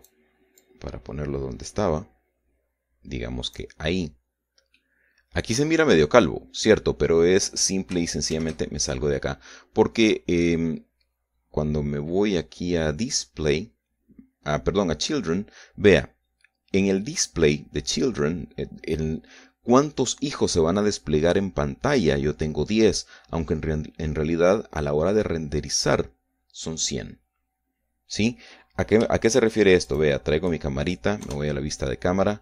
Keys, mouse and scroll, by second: 0.0-1.5 drag, 1.6-4.8 drag, 5.2-5.7 scroll down 1, 5.8-7.2 drag, 7.6-8.6 drag, 9.4 shift+z, 10.2-11.7 drag, 12.2 scroll down 1, 12.3 scroll up 1, 12.4 scroll down 1, 13.4-17.5 scroll up 2, 31.0 shift+click, 32.3 KP_0.